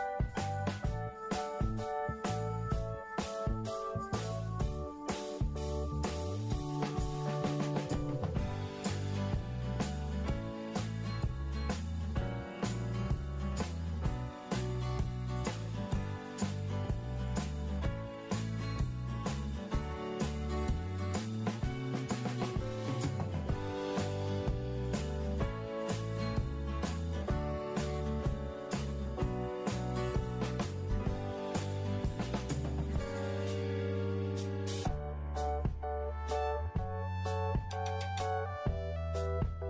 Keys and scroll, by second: 0.0 ctrl+shift+x, 2.6 Delete, 3.6 ctrl+shift+v, 22.0 Delete, 28.1 ctrl+g, 32.0 ctrl+0.